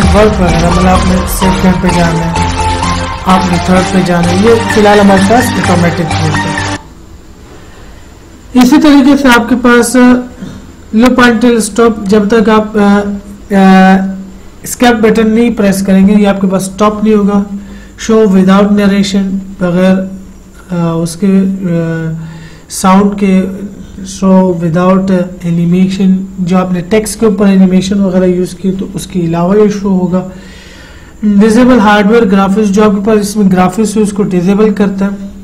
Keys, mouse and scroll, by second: 1.0 click, 9.6 click, 12.4 click.